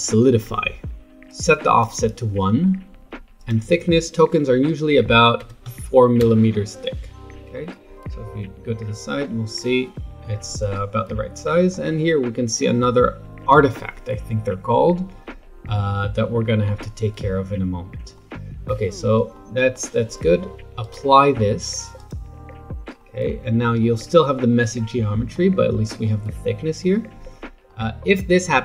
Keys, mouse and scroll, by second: 1.3-5.4 drag, 5.4 KP_0, 7.5-13.2 middle drag, 18.1-20.8 middle drag, 20.8-23.0 drag, 23.0-23.4 middle drag, 23.4 Tab, 23.8-25.7 middle drag, 25.7-26.8 scroll up 4, 26.8-28.6 middle drag.